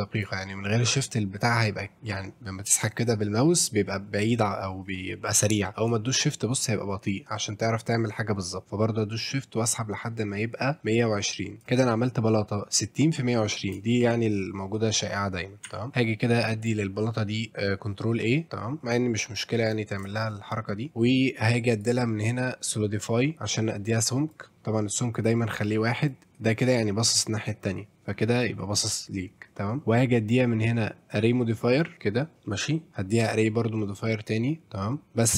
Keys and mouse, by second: 0.7-11.6 drag, 12.4 a, 13.3 middle click, 13.9 shift+middle click, 15.7 Tab, 15.9 ctrl+a, 18.8 click, 20.2 shift+middle drag, 20.5 middle click, 21.8-23.3 drag, 24.3 click, 26.1-28.4 drag, 29.6 middle drag, 29.8-31.2 drag, 31.7 middle drag, 35.0 click.